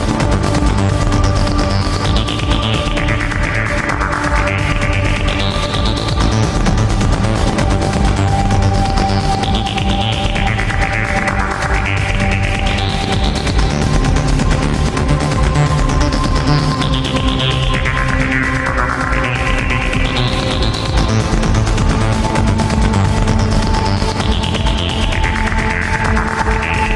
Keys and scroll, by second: 8.0 ctrl+z, 11.6 alt+space, 12.3 alt+space, 12.9 ctrl+z, 13.6 alt+space, 14.1 alt+space, 14.8 alt+space, 19.2 ctrl+z, 20.8 alt+space, 24.8 alt+space.